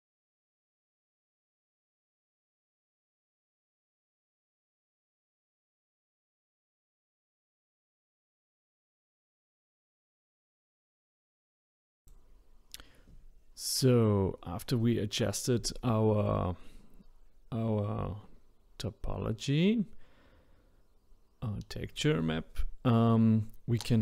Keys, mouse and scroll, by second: 1.7 r, 3.1 g, 3.7 click, 3.8 r, 5.4 r, 7.2 g, 8.4 click, 8.7 g, 10.5 r, 12.7 shift+click, 13.0 s, 13.6 click, 13.8 g, 14.7 click, 15.7 click, 16.6 ctrl+z, 16.7-17.1 ctrl+z, 17.5 click.